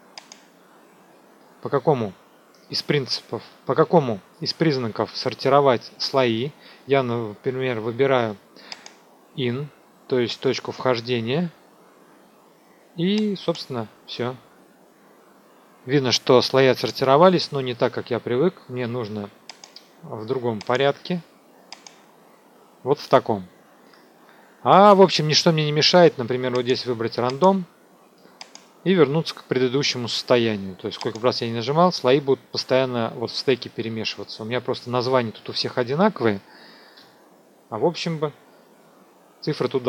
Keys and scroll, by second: 36.9 Return.